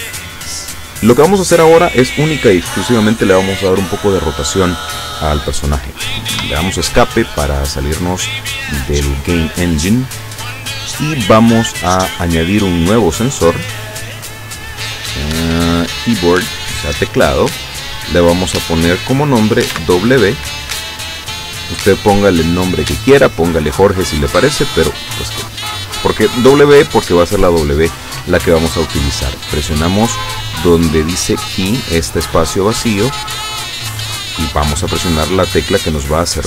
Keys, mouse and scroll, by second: 6.4 Escape, 13.2 click, 16.0 click, 18.0 click, 19.8 w, 20.8 scroll down 2, 28.5 click, 34.0 click.